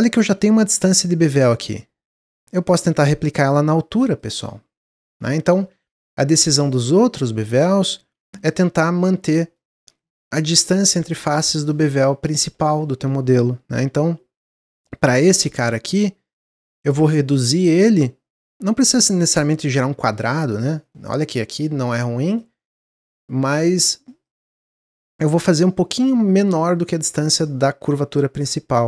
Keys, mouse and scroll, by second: 5.1 ctrl+z, 5.4 ctrl+z, 5.6 ctrl+z, 5.9 ctrl+z, 6.3 ctrl+z, 7.9 w, 8.3 alt+click, 8.7 middle click, 8.9-9.5 scroll down 5, 9.5 middle click, 10.0 alt+shift+click, 10.3 middle click, 10.5-10.9 scroll up 2, 10.9 middle click, 11.3-12.0 scroll up 4, 12.1 scroll down 1, 13.6 ctrl+b, 16.6-19.7 drag, 20.8-24.2 middle drag, 24.2-27.2 drag, 28.6 Tab.